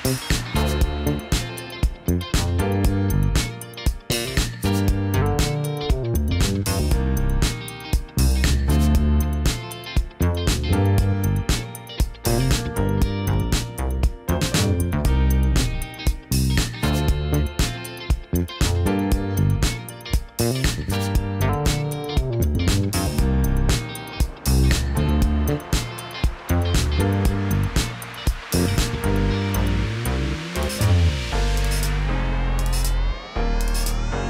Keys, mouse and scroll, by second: 1.3 click, 2.4 shift+click, 5.1 click, 8.2 click, 9.7 click, 16.9 KP_1, 17.6 Tab, 17.8 click, 18.5 Tab, 20.2 click, 21.4 alt+s, 22.1 click, 23.0 click, 23.6 alt+s, 25.3 click, 25.9 click, 27.5 alt+s, 28.4 click, 29.0 alt+s, 29.8 click, 30.8 Tab, 32.5 Tab, 32.9 click, 33.3 g.